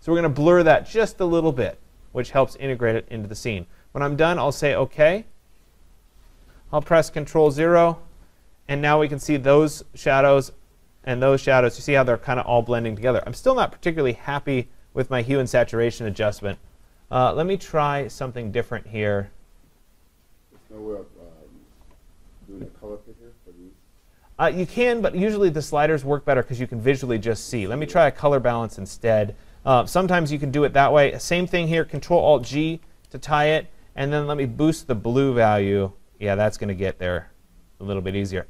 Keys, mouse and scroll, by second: 5.3 click, 7.5 ctrl+0, 14.8 click, 17.0 click, 26.7 click, 28.1 click, 32.5 ctrl+alt+g, 38.1 click.